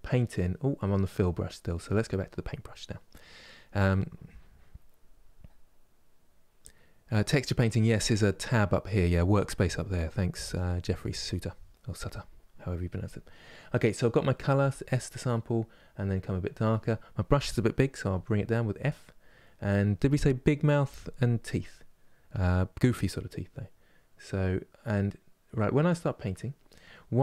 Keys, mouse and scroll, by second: 17.8 f, 23.4-26.4 drag, 27.0-27.2 middle drag.